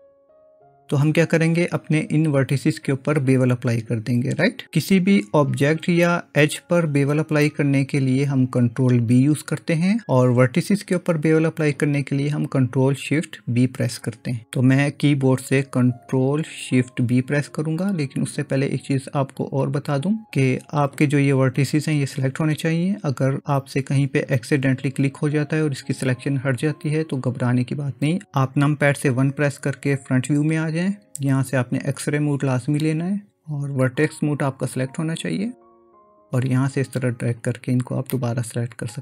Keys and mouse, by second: 0.1 ctrl+space, 29.2 KP_1, 36.4-38.2 drag, 38.2-39.0 middle drag.